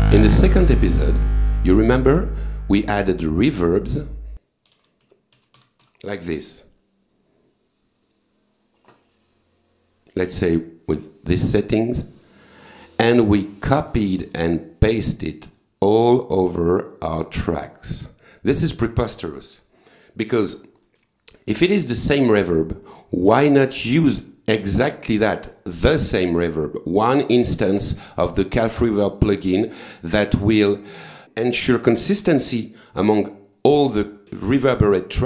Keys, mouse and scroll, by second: 2.6 right click, 3.3 click, 4.5-6.3 typing, 8.0 click, 9.2-10.4 drag, 12.2 click, 13.4 click, 16.5 click, 17.2 click, 18.6 click, 20.5 ctrl+z, 22.4 click.